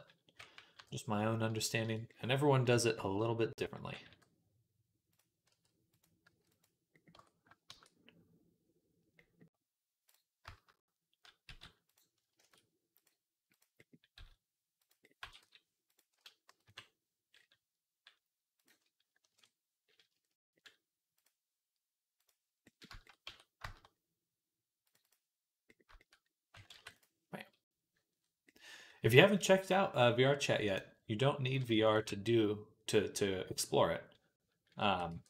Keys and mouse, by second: 0.6 KP_3, 3.6 g, 5.3 r, 6.1-9.1 drag, 6.1 s, 7.0 Tab, 7.5 shift+a, 9.9 click, 11.3 shift+s, 12.2 shift+a, 14.0 s, 15.0 g, 16.5 KP_3, 18.4-26.9 drag, 23.1 Tab, 25.9 Tab, 26.5 ctrl+r, 26.9-30.5 middle drag, 30.5 click, 31.3 ctrl+middle click, 31.7 ctrl+click, 31.8-35.2 ctrl+middle drag, 34.6 a, 35.0 e.